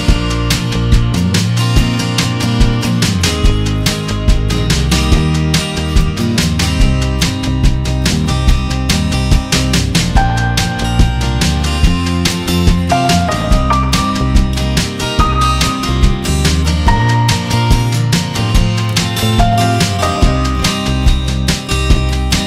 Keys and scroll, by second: 0.0 Return, 6.4 v, 8.6 F9, 9.2 v, 10.2 Tab, 11.7 space, 15.6 ctrl+t, 20.5 Left, 22.4 Right.